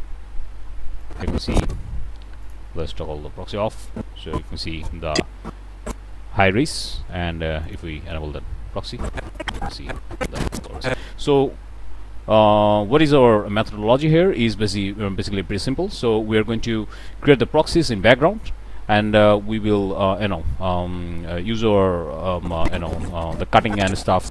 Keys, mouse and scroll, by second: 3.8-6.6 drag, 7.6 click, 8.9-11.0 drag, 11.2-11.6 middle drag, 13.5-14.7 middle drag, 22.3-24.3 drag.